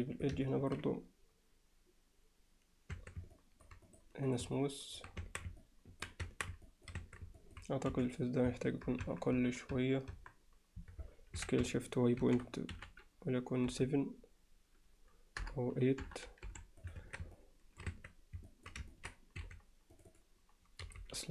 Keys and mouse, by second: 0.5 ctrl+alt+middle click, 3.0 Tab, 3.4 alt+middle click, 4.6-5.0 alt+middle drag, 5.2 Tab, 5.6 alt+middle click, 6.2 Tab, 6.7 alt+middle click, 7.0 Tab, 7.4 middle click, 7.9 3, 9.1 ctrl+KP_Add, 10.8 ctrl+KP_Add, 11.4 s, 17.0 Tab, 17.4-17.8 alt+middle drag, 17.9 Tab, 18.5 alt+middle click, 18.9 ctrl+middle click, 19.4 2, 20.1 click, 20.8 g.